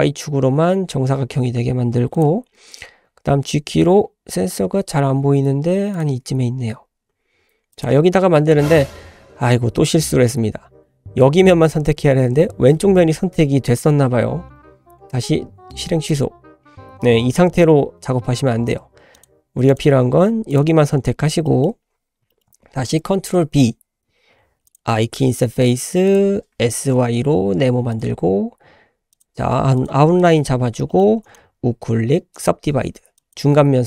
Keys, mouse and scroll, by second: 2.6 g, 5.1 r, 6.3 s, 8.3-9.4 scroll down 3, 10.1 shift+middle click, 10.6 scroll up 2, 14.4 ctrl+z, 14.9 ctrl+z, 15.5 ctrl+z, 15.9 ctrl+z, 19.1 click, 19.7 click, 19.8 typing, 20.5 shift+click, 21.0 scroll up 2, 21.4 shift+middle drag, 21.9-22.2 scroll up 2, 22.3 shift+middle click, 23.0 ctrl+b, 24.9 i, 26.5 s, 28.1 g, 29.4 s, 29.9 g, 30.4-30.8 scroll up 2, 30.9 shift+middle click, 31.3 right click, 33.2 drag.